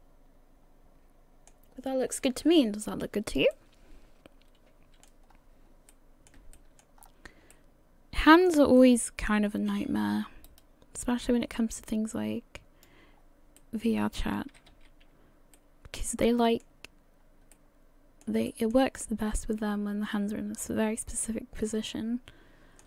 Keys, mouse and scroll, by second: 2.8-3.5 scroll down 1, 3.5 middle click, 5.3-5.8 scroll up 3, 5.9 middle click, 6.5 shift+middle click, 7.0 scroll up 2, 7.5 middle click, 8.8 middle click, 8.9 shift+middle click, 10.1-10.5 scroll up 1, 10.5 middle click, 11.6 click, 13.1 scroll down 3, 13.7 middle click, 14.5 a, 14.7 a, 15.1-15.4 scroll up 1, 15.6 middle click, 16.2 scroll down 2, 17.2-17.5 scroll down 1, 17.5 middle click, 18.5 shift+middle click, 19.0 middle click, 21.4 middle click.